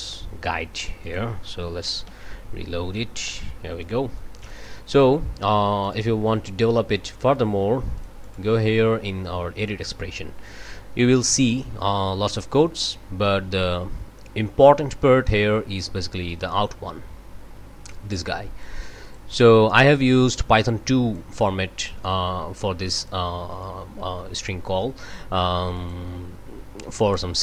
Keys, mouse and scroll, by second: 1.0 click, 2.0 ctrl+shift+r, 3.8 click, 5.8 right click, 8.0-8.5 drag, 8.2 right click, 9.6 click, 11.2 scroll down 1, 12.0-13.8 scroll down 7, 16.5-18.8 drag, 19.0 click, 20.2-21.4 drag, 22.9 click, 23.6 click, 25.7 click.